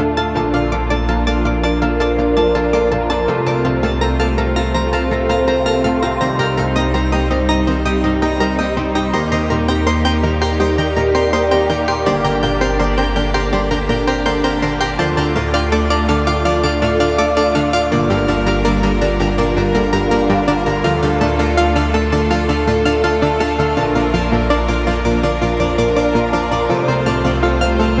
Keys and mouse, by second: 2.4 s, 5.6 s, 12.7-13.1 shift+middle drag, 15.8-16.2 middle drag, 16.8 s, 20.1-21.3 middle drag, 21.8 middle drag, 22.2-22.5 shift+middle drag, 22.7-23.3 middle drag, 23.4-23.8 drag, 23.4-23.8 middle drag, 23.4-23.8 right drag, 24.5 click, 25.1 shift+click, 25.1 shift+middle click, 25.1 shift+right click, 26.1 s, 27.6 g.